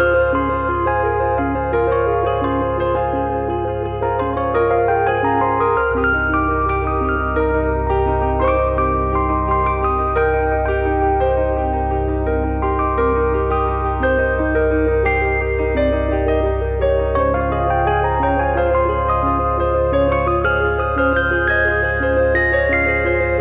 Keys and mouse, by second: 0.0 alt+z, 0.6 click, 1.9 click, 2.4 middle click, 3.7 shift+click, 5.4 click, 7.2 middle click, 8.2 click, 8.5 super+click, 9.5 click, 12.6 click, 13.8 click, 14.9 click, 15.3 click, 16.0 middle click, 16.7 KP_7, 16.9 KP_9, 18.4 click, 20.1 click, 20.7 middle click.